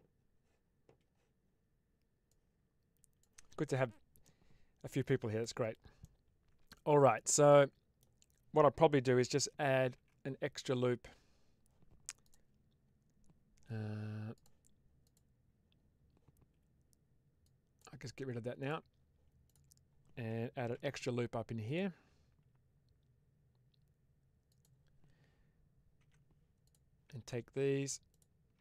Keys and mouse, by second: 4.2-5.3 middle drag, 5.9-7.9 middle drag, 9.7 ctrl+t, 10.9 Escape, 12.1 click, 14.2 click, 14.9 click, 20.6 ctrl+r, 24.4 click, 25.9 3, 26.5 click.